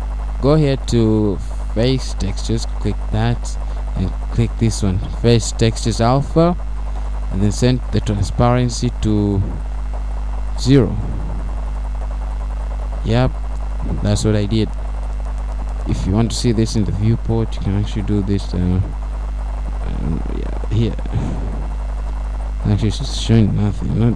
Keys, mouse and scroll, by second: 1.7-2.2 scroll down 2, 3.5 scroll down 1, 5.9 click, 7.9 click, 11.1 click, 15.3-15.8 scroll down 2, 15.8 middle click, 17.2 scroll up 1, 19.8 click.